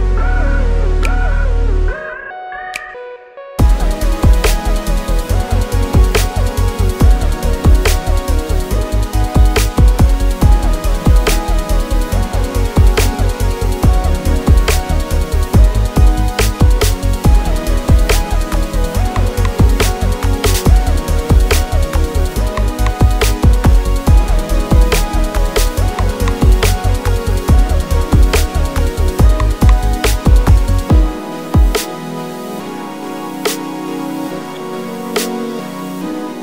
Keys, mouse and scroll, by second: 0.2 click, 0.5 s, 0.8 shift+a, 2.1 s, 2.5 click, 2.7 KP_0, 3.0 scroll down 1, 3.3-3.6 scroll up 1, 3.6 s, 3.8 click, 4.0-4.5 scroll up 1, 4.5 g, 7.0 shift+click, 7.3 scroll down 1, 9.1 KP_7, 9.4-10.0 scroll down 1, 10.0 Tab, 11.3 click, 11.4 z, 11.6-13.1 scroll up 1, 13.1-18.9 typing, 13.9 click, 14.5 click, 15.7 click, 15.9 click, 16.0 middle click, 16.9 click, 16.9 Tab, 17.1 middle click, 17.6 click, 17.9 click, 18.7 scroll down 1, 20.4 ctrl+s, 23.0 click, 24.1 click, 24.5 click, 25.4-29.0 drag, 29.5 scroll down 1, 29.8 s, 30.5 click, 30.7 middle click, 31.2 s, 31.5 click, 31.7 g, 32.3 click, 32.3-34.0 middle drag, 33.1 ctrl+s, 33.4 KP_0, 34.0 click, 35.0 click, 35.5 click, 36.1 click, 36.3-36.4 drag.